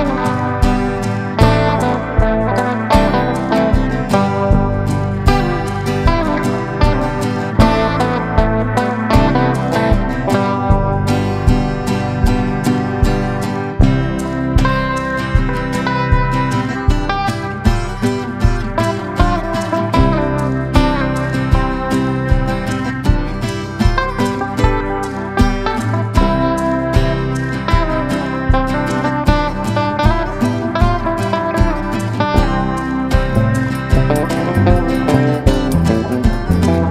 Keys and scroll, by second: 1.6 Escape, 3.3 F2, 4.2 Escape, 27.9 Escape, 28.2 F3, 36.3 F8, 36.8 shift+Home.